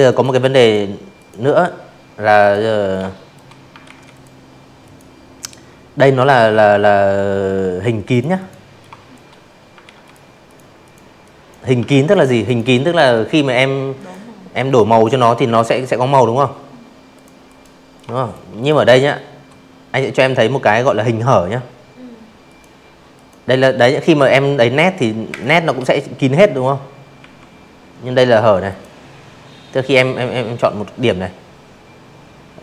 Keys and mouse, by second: 0.8 ctrl+z, 1.1 click, 1.8 click, 5.1 click, 5.3 click, 5.8-6.1 shift+drag, 6.8 ctrl+z, 7.0 click, 7.4 click, 7.8 click, 8.2 click, 8.8 ctrl+z, 9.1 click, 9.4 click, 10.9 click, 11.8 click, 14.1 click, 14.4 click, 14.9-15.3 shift+drag, 15.6 click, 15.8 click, 19.5 click, 20.1 click, 20.8 click, 22.3 space, 22.4 click, 24.2 a, 25.6 click.